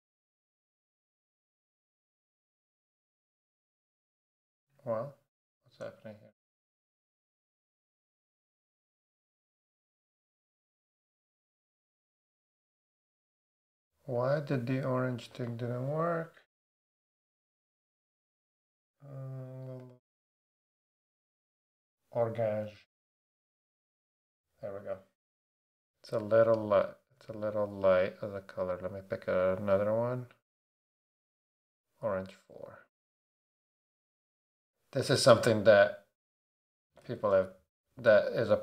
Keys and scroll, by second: 8.3 super+a, 17.0 Right, 22.6 BackSpace, 34.3 Right, 35.3 Down, 36.9 Left, 37.0 4.